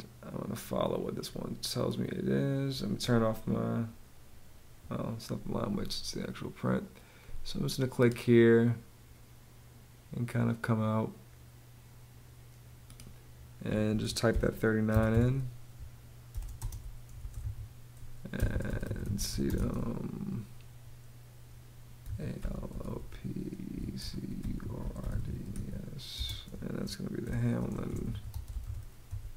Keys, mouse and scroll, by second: 13.9-19.5 typing, 21.4-28.6 typing.